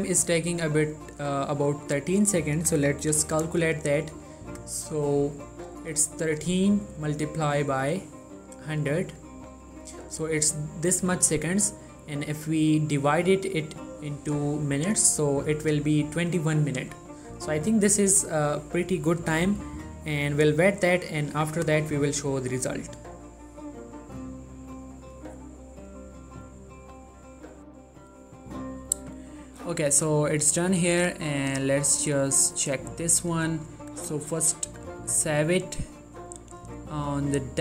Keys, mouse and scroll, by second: 1.7 click, 4.6 click, 13.2 click, 17.9 click, 24.9 click, 27.7 click, 31.8 right click, 32.5 click.